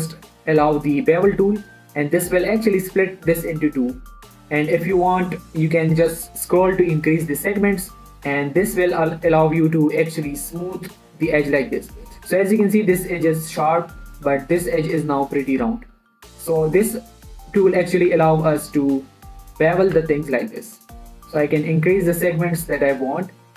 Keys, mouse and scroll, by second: 1.0 ctrl+b, 7.3-8.8 scroll up 1, 9.6 click, 10.1 Tab, 10.8-13.1 middle drag, 13.1-13.8 scroll up 1, 14.0 middle click, 14.3-14.8 scroll up 1, 14.8 scroll down 1, 16.1 middle click, 17.1-18.2 scroll down 1, 18.2 middle click, 18.5 Tab, 19.0 click, 19.2 middle click, 20.4 ctrl+b, 21.5-23.5 scroll up 1.